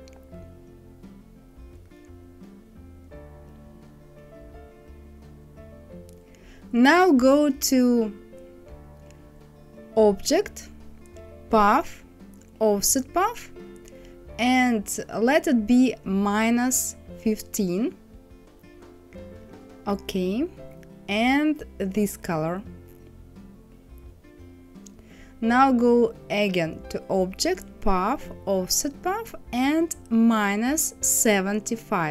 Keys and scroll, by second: 16.0 KP_Subtract, 17.0 KP_1, 17.4 KP_5, 30.8 KP_5.